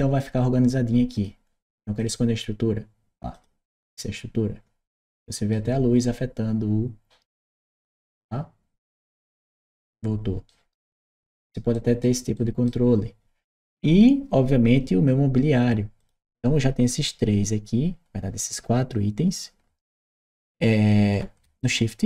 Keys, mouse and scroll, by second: 0.0 click, 0.9 click, 1.8 click, 3.1 click, 4.8 right click, 7.1 click, 9.0 click, 10.3 right click, 11.4 middle click, 11.6 right click, 12.2 right click, 13.6 middle click, 15.8 click, 21.4 shift+click.